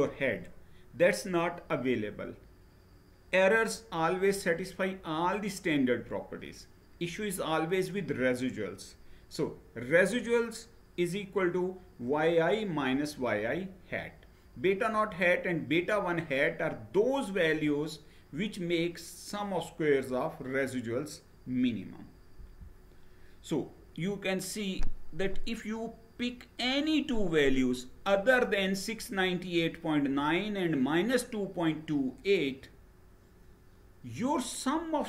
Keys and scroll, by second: 22.0 Down.